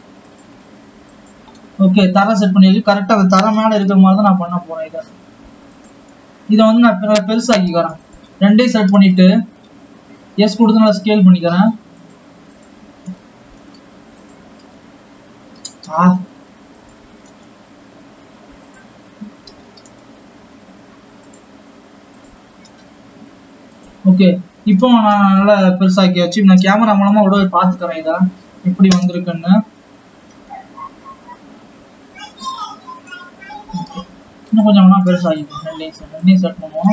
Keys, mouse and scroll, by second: 1.8 click, 3.9-4.4 scroll up 3, 4.8 g, 7.1-8.9 scroll down 7, 8.9 click, 9.6-10.1 scroll down 3, 11.0 s, 13.1 click, 14.3 s, 15.3 Escape, 16.0 click, 16.5 s, 17.0 Escape, 17.3 click, 17.9 s, 23.3 scroll down 6, 23.6 click, 23.8 s, 25.1-27.6 scroll up 6, 29.7-30.0 scroll down 1, 30.0 KP_0, 32.5-32.9 scroll up 1, 32.9 scroll down 3, 33.1 click, 35.0 scroll down 4, 35.2 click, 35.8 click, 36.6 shift+click.